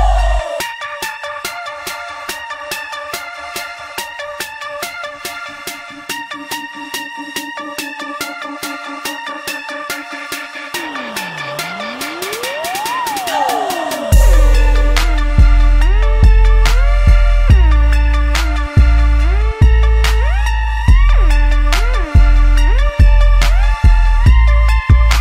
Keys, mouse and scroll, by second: 1.5 KP_7, 2.3 z, 2.9 shift+middle click, 3.7 s, 7.7 g, 12.4-14.2 ctrl+middle drag, 14.2 shift+d, 16.5 shift+click, 17.6 shift+d, 22.0 click, 24.6 g.